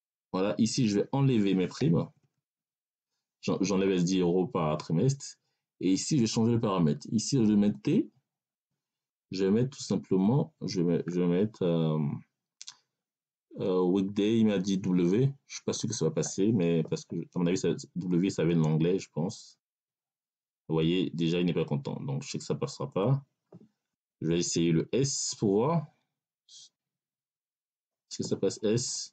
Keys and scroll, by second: 2.0 BackSpace, 10.0 BackSpace, 15.6 w, 24.4 BackSpace, 27.2 s.